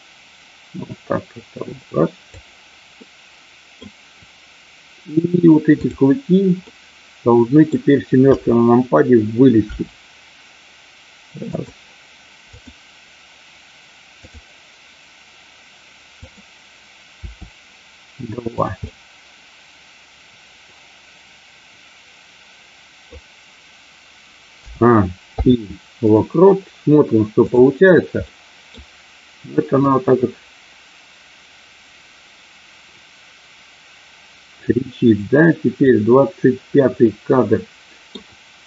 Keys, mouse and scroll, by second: 3.1 middle click, 5.8 click, 6.5-7.6 middle drag, 8.3 KP_7, 9.6 r, 11.4 click, 12.5 click, 17.0 r, 18.8-23.0 middle drag, 24.7 a, 25.3 i, 27.4 click, 28.3 middle click, 29.8-35.9 drag, 37.0-38.0 middle drag.